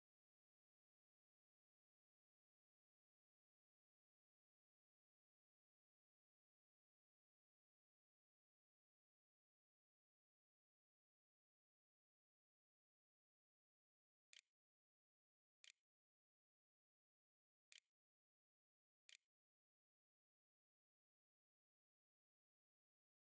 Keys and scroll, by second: 13.0-15.4 typing, 18.1 ctrl+a, 18.8 ctrl+s, 19.6 a.